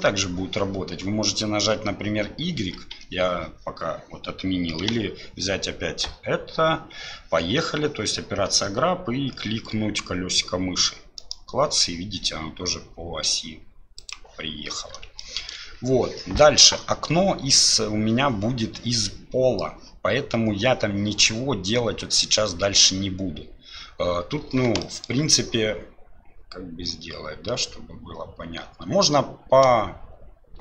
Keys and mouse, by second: 15.3 shift+click, 25.0 shift+click.